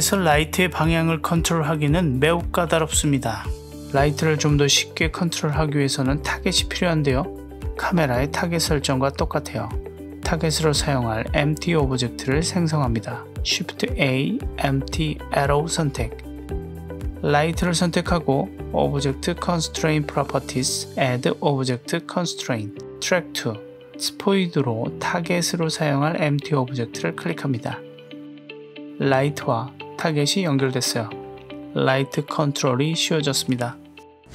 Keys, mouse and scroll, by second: 0.0 click, 2.7 right click, 3.6 middle click, 4.0 click, 4.5 click, 5.0 click, 5.8 right click, 6.4-7.6 middle drag, 8.1 click, 8.7 click, 9.1 g, 9.6 right click, 10.8 click, 13.5 shift+a, 17.7-18.1 click, 20.8 click, 21.6-24.0 drag, 24.8 click, 28.0 drag, 28.3-28.7 middle drag, 28.8 g, 32.0 right click, 33.0 click, 33.3 g.